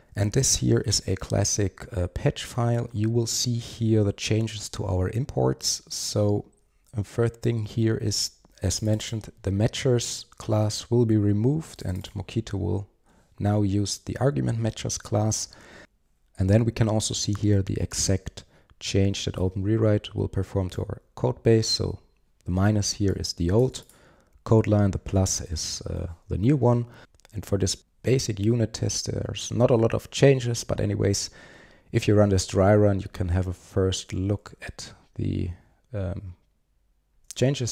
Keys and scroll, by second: 0.3 super+1, 34.1 super+1.